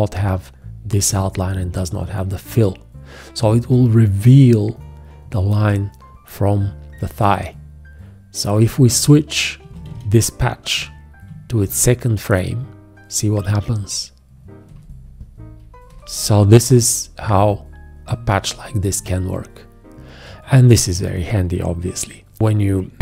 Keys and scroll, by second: 9.9 ctrl+q, 11.6 shift+., 14.7 shift+,, 15.9 shift+., 16.7 shift+,, 17.3 shift+., 18.3 shift+,.